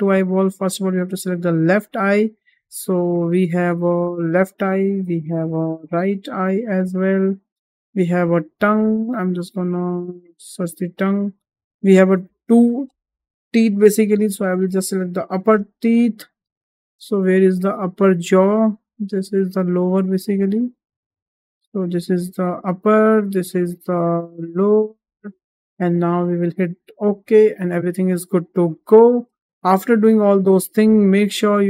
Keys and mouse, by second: 0.7-4.5 drag, 5.1-7.3 drag, 7.9-10.5 drag, 13.5 click, 14.6-22.5 drag, 23.3-25.0 drag, 27.0 click, 28.7 shift+middle drag.